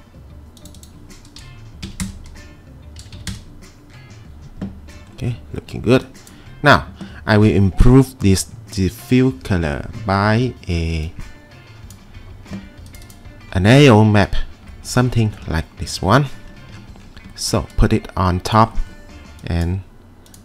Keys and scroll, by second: 1.4-1.8 typing, 2.0 Return, 3.0-3.3 typing.